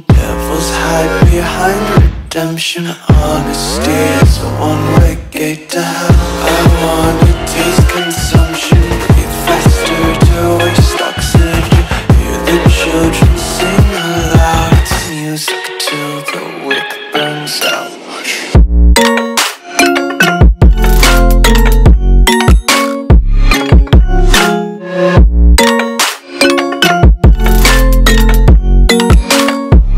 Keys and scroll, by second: 1.1 alt+super+c, 1.8-3.6 typing, 3.4 super+space, 3.5 super+space, 3.6 super+space, 3.7 super+space, 3.8 super+space, 4.9 space, 5.4 alt+super+space, 5.5 alt+super+space, 5.6 alt+super+space, 5.7-6.3 alt+super+space, 6.3 alt+super+space, 6.5 alt+super+space, 6.6 alt+super+space, 9.4-9.8 typing, 9.9 alt+super+space, 10.1 alt+super+space, 10.6 alt+super+space, 11.6-12.5 super+space, 16.2 alt+super+c, 17.3 space, 17.8 super+space, 17.9 super+space, 18.0 super+space, 19.3 super+space, 19.9 alt+super+space, 20.0 alt+super+space, 20.1 alt+super+space, 20.2 alt+super+space, 20.3 alt+super+space, 20.4 alt+super+space, 21.1 super+space, 25.5 alt+super+c, 26.1 space, 26.6 super+space, 26.6 super+space, 26.7 super+space, 26.8 super+space, 29.1 space, 29.6 alt+super+space, 29.7 alt+super+space, 29.8 alt+super+space, 29.9 alt+super+space.